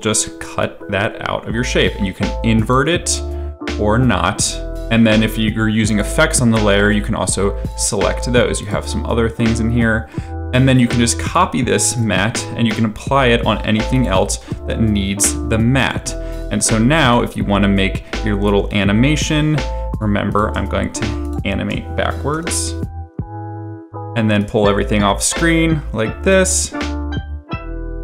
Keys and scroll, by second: 12.0 ctrl+c, 14.4 ctrl+v, 22.3 p, 27.7 space, 27.9 space.